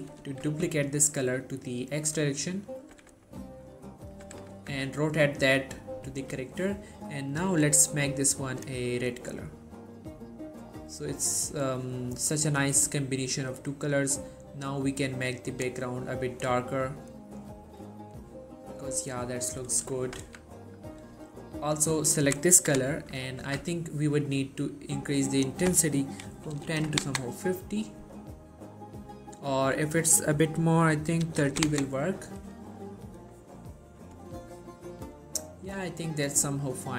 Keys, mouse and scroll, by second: 0.0 shift+d, 0.6 x, 2.1 click, 3.0 r, 3.7 right click, 4.3 r, 4.7 z, 6.3-8.8 drag, 12.5-16.0 drag, 20.3 z, 20.8 middle click, 21.8 click, 23.3 scroll up 1, 23.6 z, 25.5 click, 29.9 click, 31.8 typing, 35.8-36.9 drag.